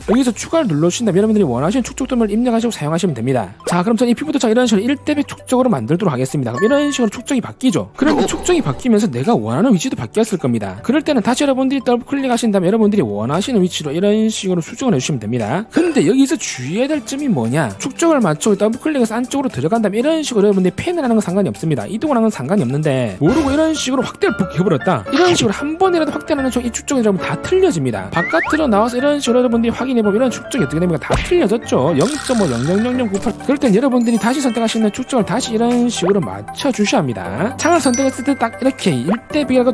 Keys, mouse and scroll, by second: 1.3 click, 6.1 click, 12.5 click, 12.7 click, 13.5-15.3 middle drag, 20.5 middle click, 21.4 middle click, 22.3 middle click, 23.6 middle click, 24.2 scroll up 1, 24.4 scroll down 1, 29.0 click, 29.1 click, 30.0 click, 35.3 click, 36.9 click, 38.9 click.